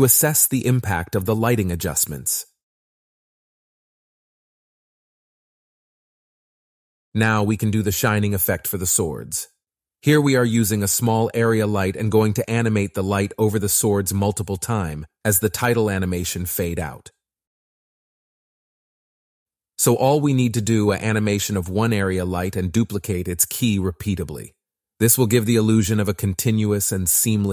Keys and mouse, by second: 1.5 space, 1.5 click, 3.4 click, 4.7 space, 6.3 s, 6.4 click, 8.4 KP_7, 9.1 KP_Decimal, 11.1 click, 12.0 shift+d, 12.2 z, 12.6 z, 13.5 r, 14.4 click, 14.7 g, 18.5-19.5 drag, 20.6 click, 23.9 click, 24.8 click, 26.6 click.